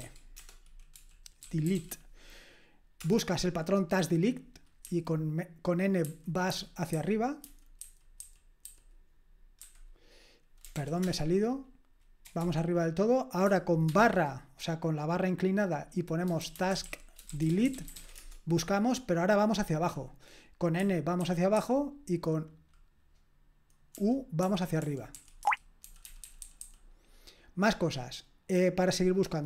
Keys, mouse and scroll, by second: 0.0-2.2 typing, 4.8 typing, 6.0-9.6 typing, 10.8 ctrl+p, 11.0 Return, 12.4 typing, 13.9 typing, 16.2-19.3 typing, 20.8-21.6 typing, 24.4-26.6 typing.